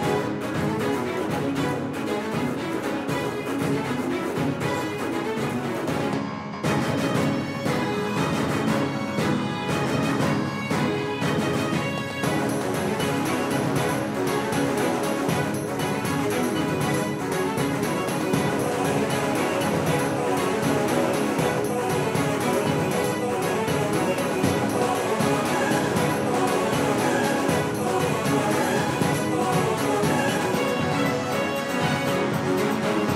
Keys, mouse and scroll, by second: 2.5 s, 5.0-9.1 drag, 10.4 KP_1, 12.7 middle click, 13.7 z, 14.6 middle click, 15.1 z, 16.6 KP_3, 18.4 right click, 20.9 KP_3, 22.7-25.1 right drag, 27.2 ctrl+j, 28.7-32.4 right drag, 31.7 g.